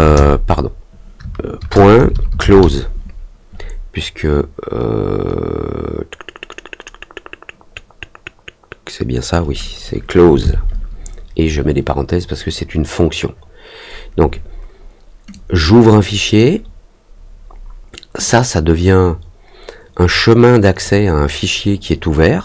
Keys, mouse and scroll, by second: 15.3-16.3 drag, 18.2-20.8 drag.